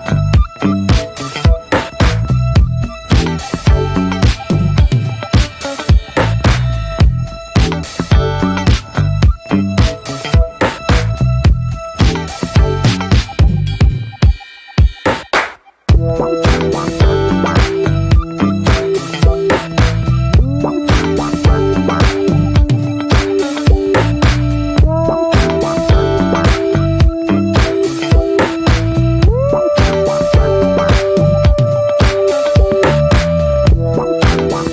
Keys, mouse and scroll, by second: 0.5-2.3 drag, 2.3 scroll down 5, 2.6 middle click, 2.7 scroll up 1, 2.8 scroll down 1, 3.0 shift+middle click, 3.3-4.9 scroll up 5, 3.4 shift+middle click, 4.0 shift+middle click, 4.9-6.1 shift+middle drag, 6.1 scroll up 1, 6.4-7.5 scroll down 1, 7.5 click, 10.4-16.4 drag, 16.4 scroll up 1, 16.6 ctrl+z, 18.8-20.4 drag, 20.4 ctrl+z, 20.9 ctrl+z, 27.5-28.6 drag, 29.8-31.3 shift+drag, 31.3-32.0 scroll up 3, 31.6 shift+middle click, 32.0-34.0 shift+drag, 34.0 scroll down 1, 34.1 middle click.